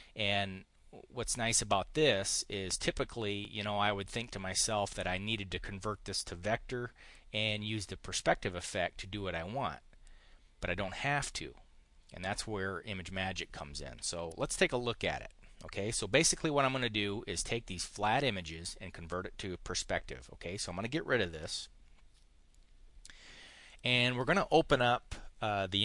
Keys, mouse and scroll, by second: 2.2 click, 21.2 Delete, 23.5 click.